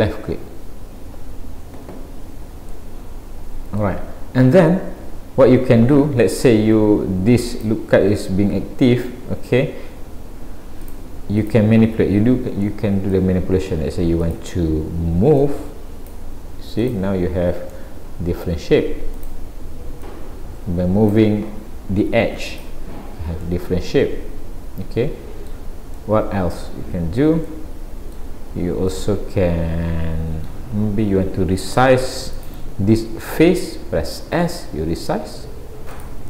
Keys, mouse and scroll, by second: 2.7 middle click, 4.8-5.4 scroll up 1, 7.5 click, 10.8 click, 11.4 click, 12.7 middle click, 14.3 click, 15.4 click, 16.8 click, 17.7 middle click, 19.2 click, 20.0 click, 22.5 click, 23.5 middle click, 25.9 middle click, 31.7 click, 32.4 click, 34.4 s.